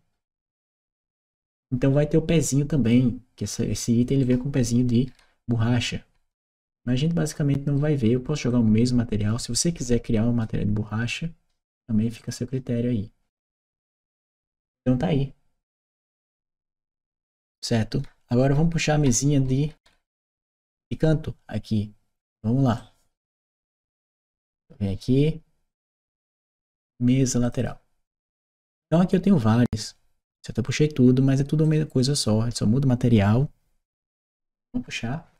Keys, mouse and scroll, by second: 0.7-2.7 drag, 4.0-7.6 right drag, 5.0 w, 6.2 s, 8.3-10.2 drag, 12.0 click, 13.8 click, 14.3-20.6 right drag, 22.6-23.9 drag, 24.3 click, 25.6 click, 27.3 click, 27.4 click, 31.5 click.